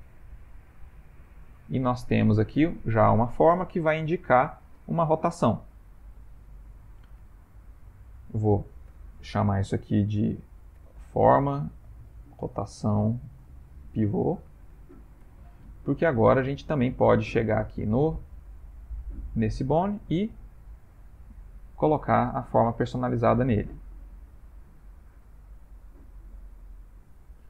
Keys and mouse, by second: 0.2 click, 0.4 e, 1.8 ctrl+middle click, 1.9 ctrl+middle click, 2.2 Tab, 3.0 ctrl+middle click, 3.0 ctrl+middle click, 3.4 ctrl+middle click, 6.6 ctrl+middle click, 7.3 shift+middle click, 8.9 F2, 16.4 middle click, 16.5 middle click, 16.9 middle click, 18.1 middle click, 19.1 middle click, 19.5-19.8 ctrl+middle click, 20.5 click, 21.9 click, 23.0 click, 24.6 click, 26.8 ctrl+middle click, 27.4 shift+middle click.